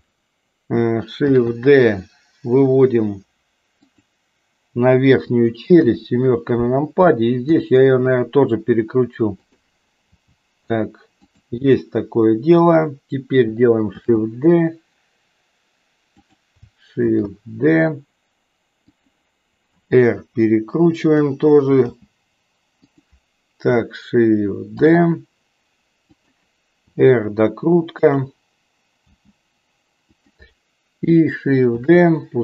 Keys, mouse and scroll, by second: 1.3 shift+d, 5.7 KP_7, 7.4 r, 10.2 g, 14.0 shift+d, 17.2 shift+d, 19.8 r, 21.9 g, 24.7 shift+d, 26.8 r, 29.0 g, 31.8 shift+d.